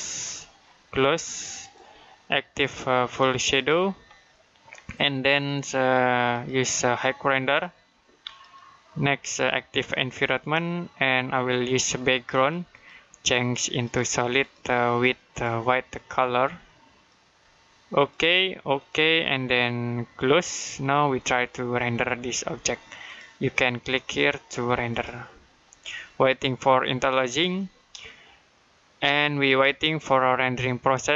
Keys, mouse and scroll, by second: 4.0 middle click, 10.0 click, 22.9 click.